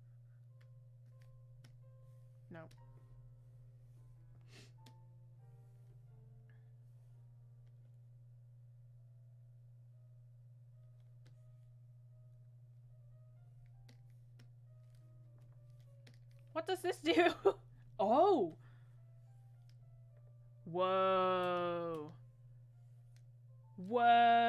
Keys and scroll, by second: 18.2 ctrl+z.